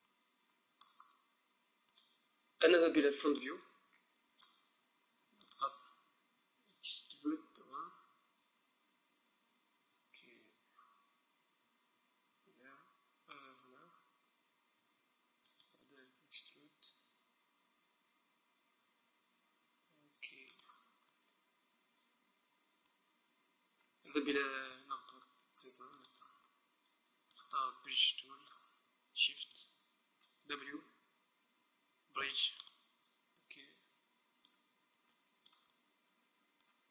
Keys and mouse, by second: 2.1-3.9 right drag, 3.2 KP_1, 7.8 e, 15.8-17.4 drag, 16.1 e, 20.8-22.3 drag, 21.2-23.8 middle drag, 23.8 z, 24.3 middle click, 26.0-28.0 middle drag, 26.0-27.8 right drag, 29.6-31.3 right drag, 30.6 w, 34.1-36.9 middle drag.